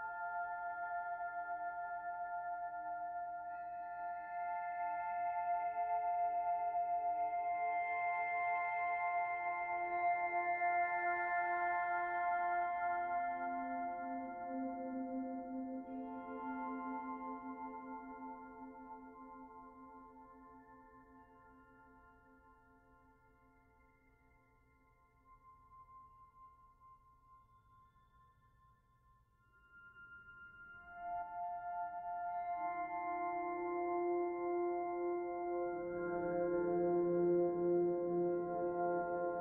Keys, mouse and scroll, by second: 0.3-0.7 scroll down 2, 0.7 shift+middle click, 1.1-1.7 scroll up 1, 1.7 middle click, 3.1 Tab, 3.6 middle click, 6.9 Tab, 7.2 middle click, 7.6 middle click, 10.8 middle click, 12.6 shift+a, 17.0 Delete, 18.9 shift+a, 23.8 click, 26.3 middle click, 27.0 click, 29.0 s, 31.3 middle click, 32.3 click, 33.9 middle click, 34.8 click, 35.5 middle click, 36.1 scroll up 1, 36.3 middle click, 38.0 Tab, 38.5 middle click.